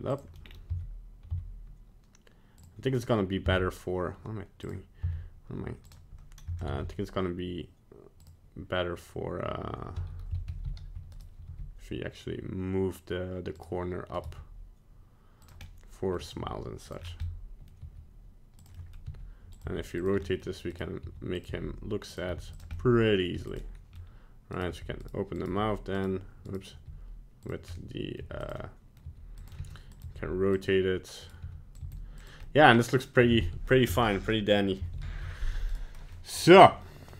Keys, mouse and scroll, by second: 0.4 scroll down 2, 0.7 z, 1.3 z, 3.4 z, 5.0 z, 6.6 ctrl+Tab, 10.0 a, 10.5 alt+r, 10.6 alt+g, 11.1 right click, 11.5 g, 14.2 right click, 14.7 g, 15.6 middle click, 16.1 middle click, 16.2 g, 17.0 scroll down 3, 17.2 middle click, 17.8 g, 18.7 middle click, 19.1 r, 19.6 g, 20.2 middle click, 20.7 right click, 21.0 r, 21.5 g, 22.4 r, 22.8 middle click, 23.3 g, 23.7 middle click, 23.9 middle click, 23.9 scroll down 1, 24.6 right click, 24.7 g, 25.4 right click, 25.5 g, 26.5 right click, 26.7 g, 27.7 middle click, 28.2 g, 28.5 middle click, 29.1 g, 29.6 r, 30.0 g, 31.2 right click, 31.4 r, 31.9 g, 32.4 middle click, 33.2 middle click, 33.9 a, 35.0 alt+r, 35.0 alt+g, 35.7 right click, 36.1 middle click, 36.5 scroll up 1, 36.8 middle click, 37.0 middle click.